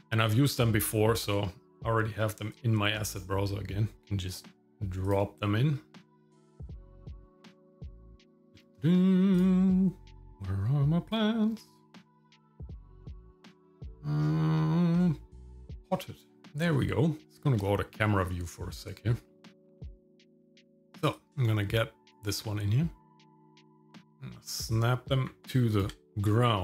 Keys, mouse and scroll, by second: 0.3-1.3 drag, 2.5 click, 3.9 click, 5.0-7.1 drag, 8.5 scroll down 2, 9.3 click, 11.1 click, 11.6-11.9 scroll down 2, 15.8 click, 17.2 shift+middle click, 17.3 scroll up 2, 18.0 middle click, 18.7 middle click, 21.1 click, 23.1 middle click, 23.8 click, 25.3 g, 26.3 shift+middle click.